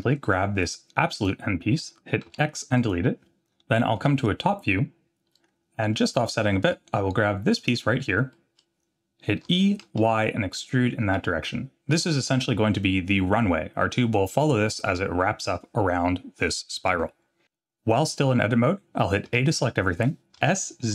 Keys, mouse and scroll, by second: 1.2 click, 2.3 x, 4.0 KP_7, 5.3 middle click, 7.6 click, 8.3 middle click, 8.8 scroll down 2, 9.5 e, 12.4 scroll down 1, 19.3 a, 20.4 s.